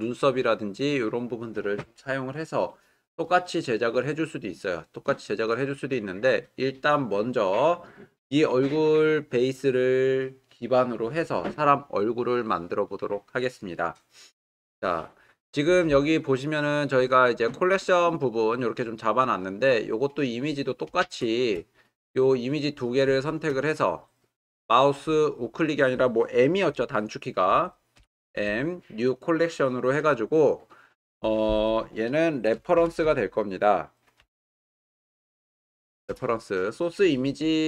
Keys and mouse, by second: 23.3 shift+click, 28.0 m, 34.7 e.